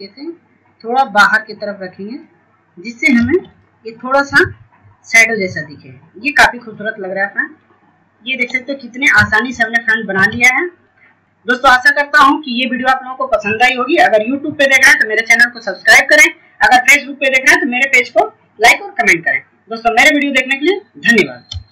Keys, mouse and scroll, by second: 3.0 ctrl+space, 3.0 click, 3.5 scroll up 1, 5.4 scroll down 1, 6.1 click.